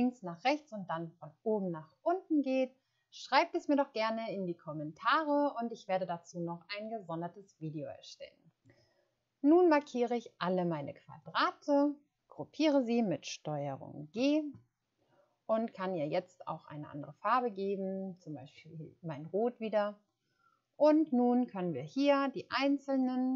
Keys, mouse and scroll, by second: 14.0 ctrl+g.